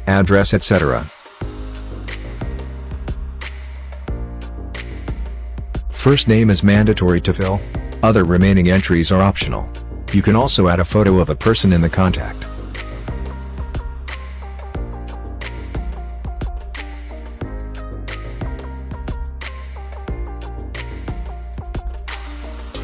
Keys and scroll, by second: 1.8 s, 2.1 Caps_Lock, 3.0-5.5 typing, 6.0 Tab, 7.7 Caps_Lock, 7.9-10.6 typing, 8.1 Caps_Lock, 10.8 Tab, 13.1 Tab, 14.0-16.2 typing, 17.6-22.8 typing, 19.2 Caps_Lock.